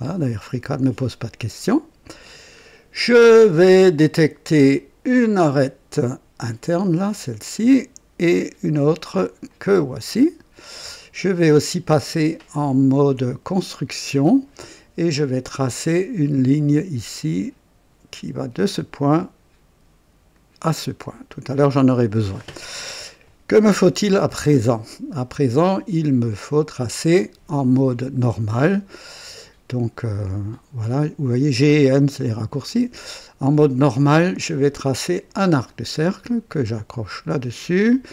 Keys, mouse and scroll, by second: 0.9-1.3 scroll up 1, 1.5-2.3 right drag, 2.3 scroll down 1, 5.0 click, 7.0 click, 9.4 click, 13.5 click, 15.5 click, 18.5 click, 20.3 click, 21.3 right click, 32.4 click, 35.2 click, 37.0 click.